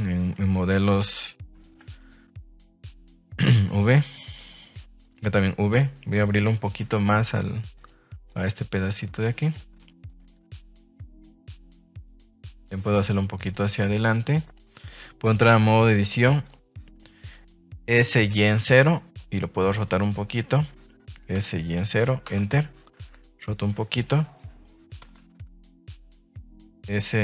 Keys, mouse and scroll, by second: 0.2 right click, 1.0 g, 1.6 Escape, 3.5 v, 5.0 right click, 6.2 Escape, 6.8 v, 8.2 right click, 8.8 click, 8.8 g, 9.3 right click, 10.0 click, 10.6 right click, 10.8 g, 11.1 click, 11.6 right click, 11.7 g, 12.2 click, 12.6 right click, 12.8 g, 13.4 click, 14.0 g, 14.3 click, 15.8 a, 18.5 KP_0, 19.5 r, 20.4 Escape, 21.3 s, 21.7 y, 21.9 KP_0, 22.2 KP_Enter, 22.9 r, 24.0 click, 25.0 a, 25.1 a.